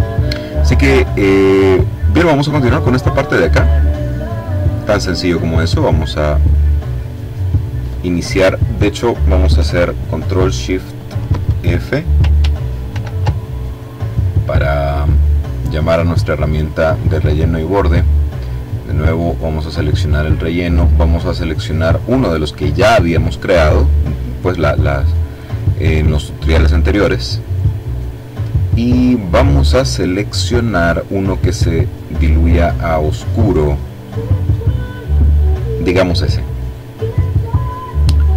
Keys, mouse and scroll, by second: 2.3 click, 5.9 click, 12.9 ctrl+shift+f, 15.6-17.0 drag, 19.2 click, 20.7 click, 35.1 click.